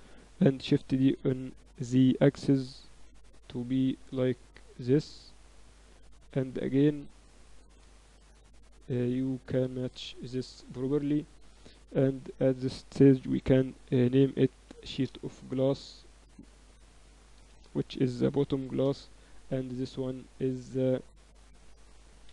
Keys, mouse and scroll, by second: 0.6 shift+d, 2.3 g, 4.7 z, 5.4 Tab, 6.6-7.9 drag, 9.3-10.3 drag, 10.0 z, 10.3 Tab, 12.3-14.0 drag, 14.7 s, 16.0-18.0 drag, 18.2 o, 19.8-21.4 right drag, 21.4-22.3 drag.